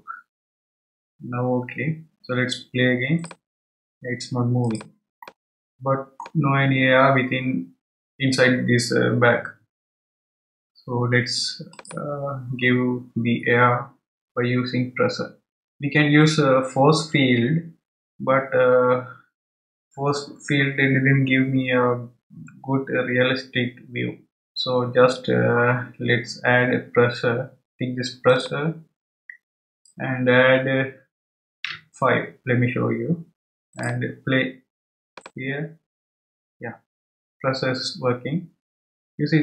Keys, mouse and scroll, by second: 1.2-1.8 scroll down 2, 1.8 scroll down 1, 3.2-5.2 drag, 5.2-8.3 middle drag, 11.7-14.8 drag, 28.4 click, 29.7-32.8 drag, 35.1 click.